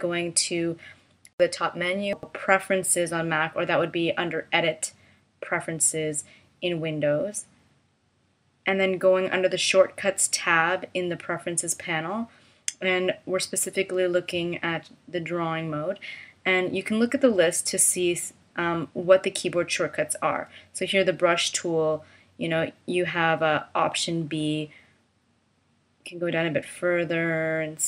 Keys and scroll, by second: 25.4 h.